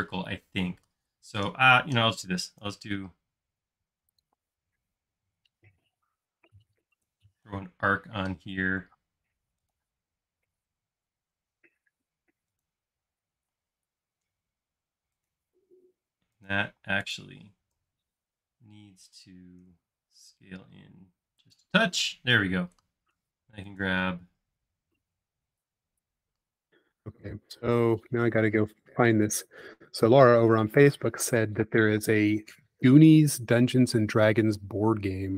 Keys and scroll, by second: 2.7 a, 13.0 space, 13.6 l, 16.9 space, 17.7 s, 21.9 space, 34.6 super+s.